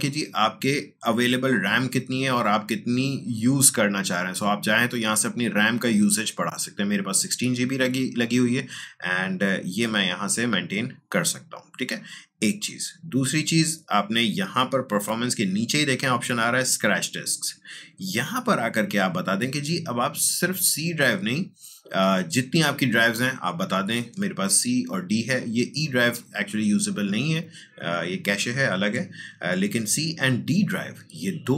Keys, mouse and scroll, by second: 4.5-8.9 drag, 8.9-12.8 drag, 16.9 click, 16.9-21.7 drag.